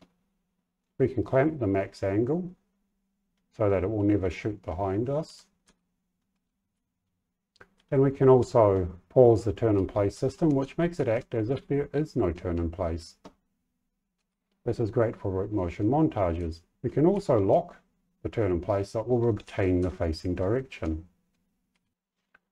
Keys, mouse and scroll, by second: 4.9-6.7 typing, 7.7 a, 8.3 a, 9.4-12.3 typing, 14.1 w, 14.5 a, 16.3 w, 17.1 s.